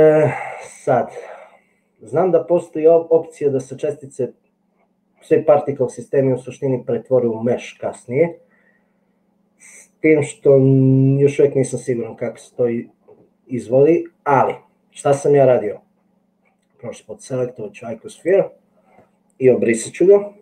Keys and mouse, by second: 2.6 click, 18.2 click, 20.3 Delete.